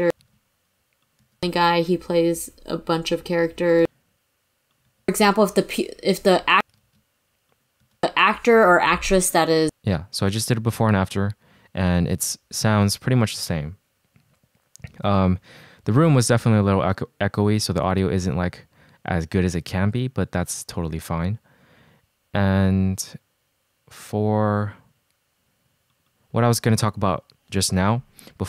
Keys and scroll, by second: 0.4 super+z, 1.3 space, 7.0 shift+super+z, 8.0 space, 9.6 space.